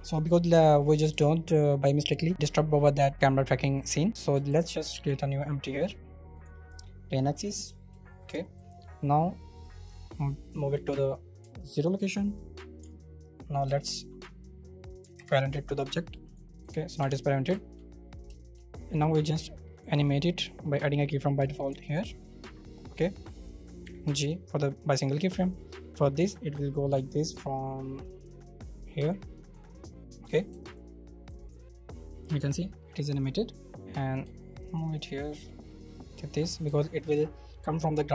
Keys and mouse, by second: 4.5 shift+a, 7.1 s, 7.8 shift+drag, 7.9 middle click, 8.4 shift+click, 9.3 right click, 10.8 alt+g, 11.6 shift+click, 15.1 ctrl+p, 16.3 right click, 16.6 g, 17.0 Escape, 17.7 shift+click, 18.4 shift+click, 20.6 g, 20.9 click, 22.1 ctrl+z, 23.8 g, 24.8 click, 25.1 middle click, 26.3 g, 29.5 shift+middle click, 31.2 g, 32.4 right click, 32.5-33.8 drag, 34.2 r, 35.9 right click.